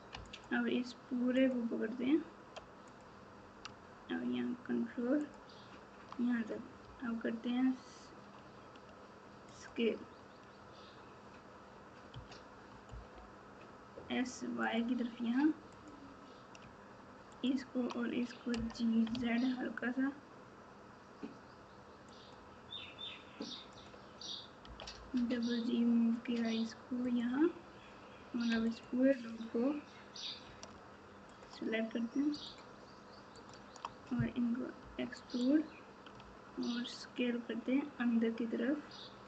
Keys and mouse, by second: 0.2 alt+click, 1.4 alt+click, 5.2 click, 6.8 s, 12.1 s, 15.8 click, 18.5 g, 23.8 click, 24.6 g, 32.4-33.8 alt+shift+drag, 34.8 e, 36.1 s.